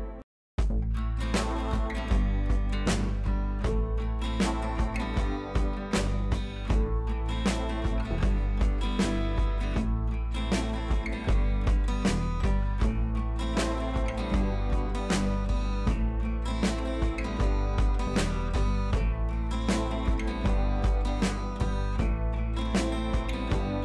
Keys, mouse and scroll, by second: 5.6-6.0 shift+drag, 8.4 shift+drag, 14.0-15.4 drag, 16.1 scroll down 1, 16.8-17.3 alt+scroll down 2, 17.8-18.1 alt+scroll down 1, 18.9-19.6 drag, 20.6 ctrl+z, 21.2-22.0 shift+drag, 23.5 alt+scroll up 1.